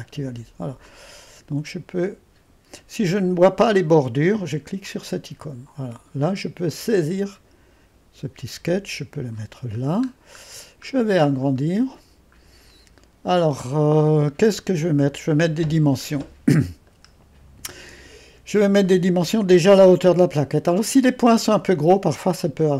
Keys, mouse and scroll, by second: 0.9-2.6 drag, 4.9-9.8 drag, 9.8-12.4 scroll up 2, 12.4-13.8 scroll up 1, 16.9-19.0 middle drag, 16.9 scroll, 19.0-21.9 scroll up 2.